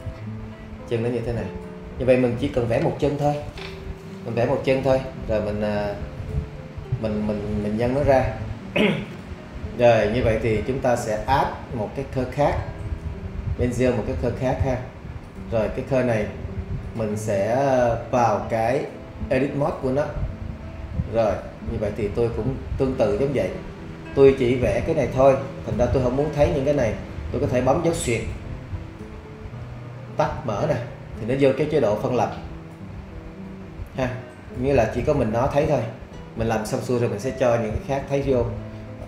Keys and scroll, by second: 27.3 /, 29.4 /, 30.3 /.